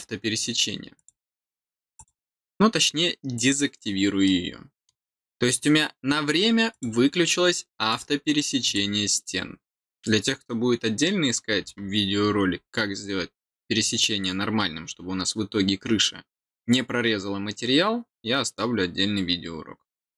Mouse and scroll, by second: 0.9 click, 1.9 click, 4.2-4.8 middle drag, 5.1-5.4 middle drag, 6.6 click, 7.8 click, 8.6 click, 12.2 scroll up 1, 14.8 scroll down 2.